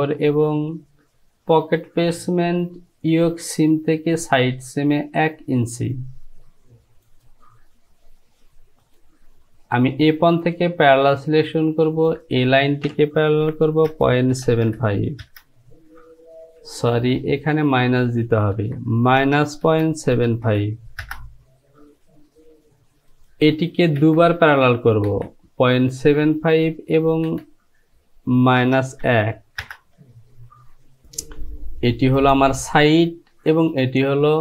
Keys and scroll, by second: 13.5 Down, 14.0 KP_Decimal, 14.4 KP_7, 14.7 KP_5, 15.3 Return, 17.0 ctrl+z, 18.6 Down, 19.2 KP_Subtract, 19.7 KP_Decimal, 20.2 KP_7, 20.5 KP_5, 21.1 Return, 24.1 Down, 28.7 KP_Subtract, 29.1 KP_1, 29.7 Return.